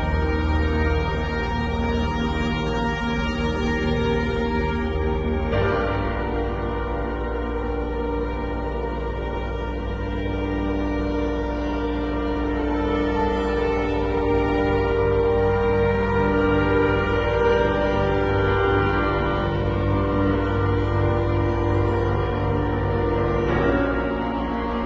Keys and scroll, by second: 1.8 v, 3.2 i, 4.5 b, 9.9 e, 24.7 v.